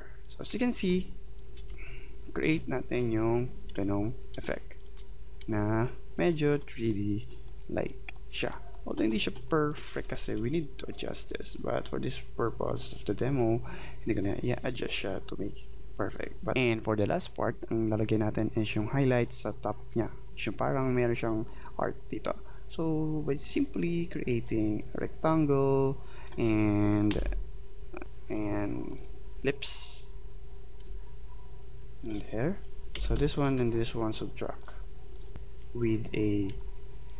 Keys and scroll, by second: 9.8 space, 30.8 space, 32.9 v, 36.5 space.